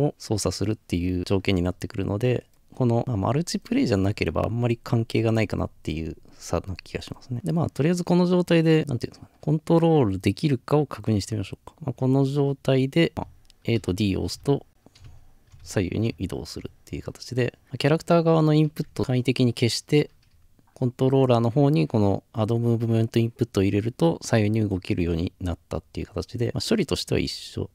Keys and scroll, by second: 13.1 typing, 15.4 typing, 16.9-17.7 typing, 19.0 Escape.